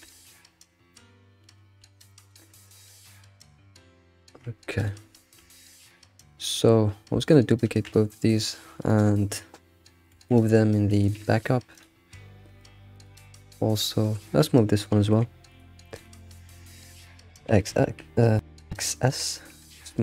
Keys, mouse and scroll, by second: 0.3-0.9 scroll down 1, 0.9-1.6 middle drag, 1.6 scroll up 3, 1.9 alt+shift+z, 2.1-2.6 middle drag, 2.7 alt+middle click, 3.3 Tab, 3.6 scroll up 2, 4.2 Tab, 4.7 alt+click, 5.4 Tab, 5.6-6.2 scroll down 8, 6.2-7.2 shift+middle drag, 7.2 shift+drag, 7.9 shift+d, 10.2 m, 11.7 click, 13.0 click, 15.1 m, 15.9 click, 16.4 ctrl+s, 17.5 x, 18.9 shift+middle click, 19.4-20.0 scroll up 2.